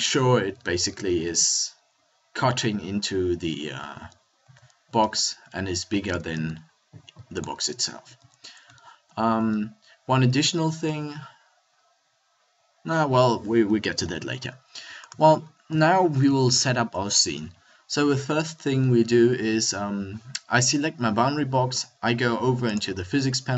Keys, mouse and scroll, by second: 0.5 z, 2.8 middle click, 3.3 middle click, 4.4 s, 7.8 click, 8.1 a, 14.1 KP_1, 15.7 z.